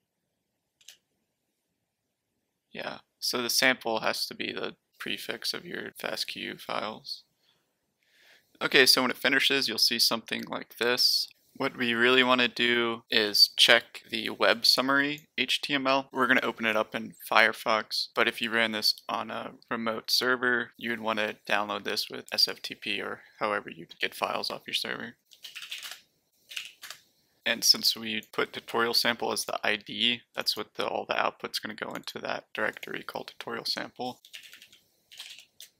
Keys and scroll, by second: 0.8 Return, 25.0-27.0 typing, 34.0-35.7 typing.